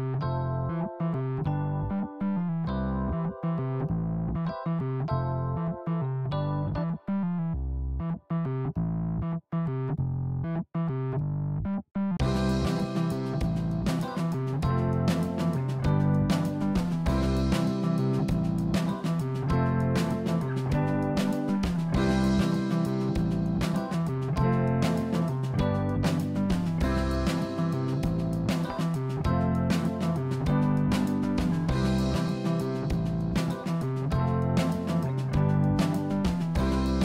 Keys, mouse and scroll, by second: 3.4 s, 10.7 click, 11.4 scroll up 1, 12.4 click, 13.2-14.2 scroll down 5, 14.2-14.7 scroll down 1, 14.7-16.4 middle drag, 16.9 click, 17.6-18.9 scroll up 4, 18.9 g, 23.2 click, 23.8-25.3 middle drag, 25.3 click, 25.7-26.1 scroll up 5, 26.1 middle click, 27.0 click, 28.3 Tab, 28.7 click, 30.2 Delete, 31.2 click, 31.8-33.5 middle drag, 33.6 click, 35.4 KP_1.